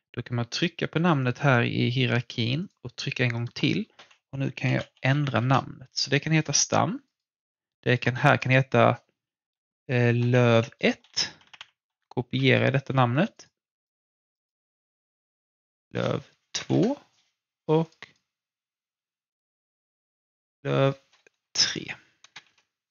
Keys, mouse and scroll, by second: 0.5 click, 4.4-5.7 typing, 6.4 click, 9.9-11.3 typing, 11.8 shift+Left, 12.3 ctrl+shift+c, 13.3 click, 15.4 ctrl+v, 16.5 typing, 16.7 Return, 17.8 click, 20.3 ctrl+v, 21.7-22.3 typing, 22.4 Return.